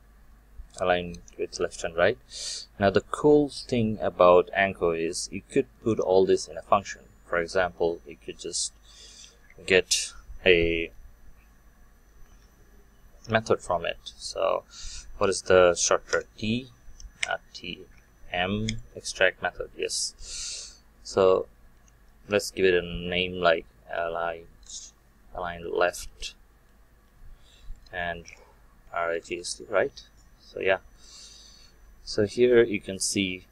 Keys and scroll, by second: 1.5 ctrl+v, 16.2 ctrl+alt+t, 31.1 ctrl+alt+m.